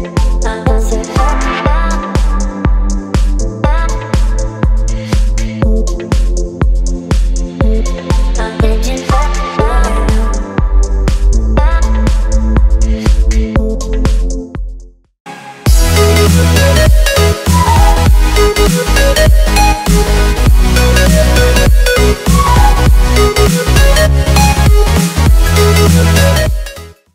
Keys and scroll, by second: 5.2 z, 7.2 v.